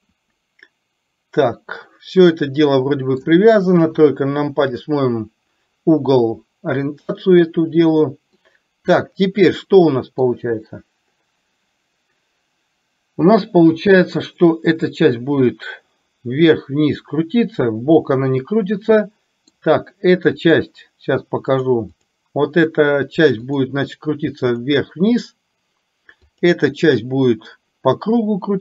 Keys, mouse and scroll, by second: 3.9 KP_3, 8.4-10.4 middle drag, 14.3 middle click, 18.5-19.7 middle drag, 20.5 click, 21.8 click, 23.5 click, 26.3 click.